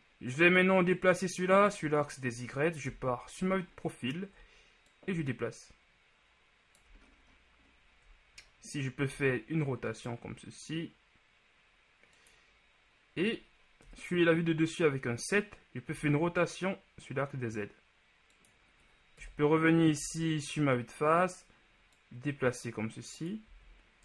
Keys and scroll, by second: 3.0 ctrl+KP_3, 3.6 ctrl+KP_3, 9.2 r, 14.2 KP_7, 16.0 r, 19.4 KP_1, 20.1 z, 23.6 z.